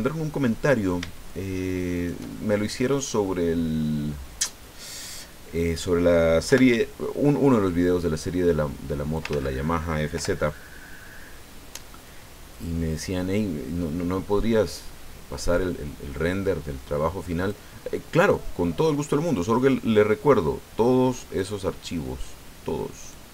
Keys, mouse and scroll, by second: 1.9 shift+right click, 2.3 shift+click, 2.4 shift+middle click, 3.0-4.6 drag, 6.4 o, 8.2-9.3 drag, 9.3 ctrl+z, 10.1 o, 12.0 click, 12.7-13.9 scroll down 3, 18.3 click, 18.6-19.0 scroll down 1, 19.0 middle click, 19.5 scroll down 1, 23.0 right click.